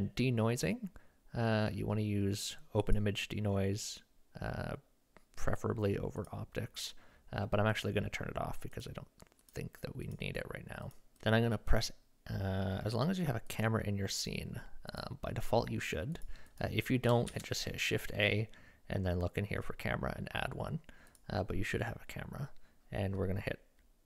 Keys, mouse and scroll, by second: 3.0-6.3 drag, 7.7 click, 8.7 click, 9.5 click, 10.1 click, 10.9 click, 14.9 click, 16.1 click, 17.3 shift+a.